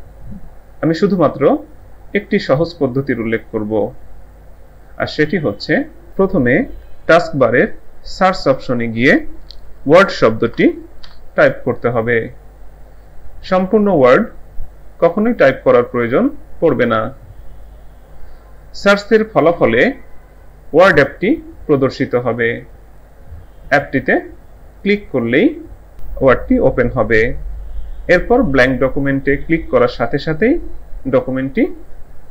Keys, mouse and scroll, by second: 6.1 click, 9.7-11.1 typing, 24.8 click, 29.5 click.